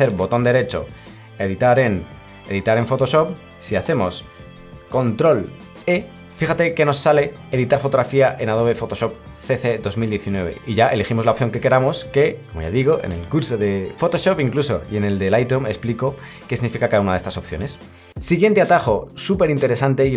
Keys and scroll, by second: 5.8 ctrl+e.